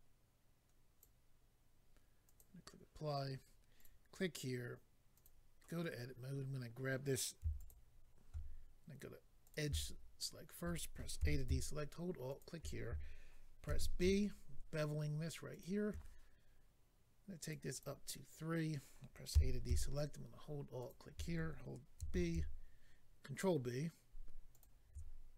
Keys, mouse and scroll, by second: 2.2 click, 2.4 click, 3.7 click, 3.8 click, 5.1 click, 5.2 click, 5.8-6.5 scroll up 1, 7.0 scroll up 1, 7.5 alt+click, 7.7 alt+click, 9.4 click, 11.2 alt+a, 12.3 alt+click, 13.7 ctrl+b, 15.5 shift+click, 17.4 click, 17.7 click, 19.3 a, 20.8 alt+click, 22.0 ctrl+b, 24.5 shift+click.